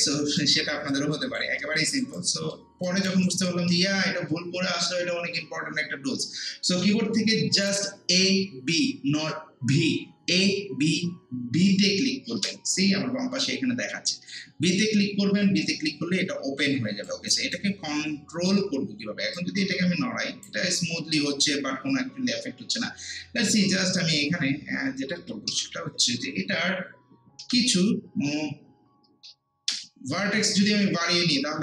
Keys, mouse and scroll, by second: 0.6 alt+click, 1.1 alt+right click, 1.6 alt+middle click, 2.0 alt+right click, 2.4 alt+middle click, 2.9 alt+click, 3.4 alt+right click, 3.7 alt+middle click, 12.4 b, 15.8 b, 17.1 alt+click, 17.6-19.3 alt+right drag, 19.3-23.1 drag, 23.6 ctrl+z, 23.6 click, 24.2-24.7 scroll down 1, 25.2 ctrl+z, 29.7 b, 31.5 scroll down 1.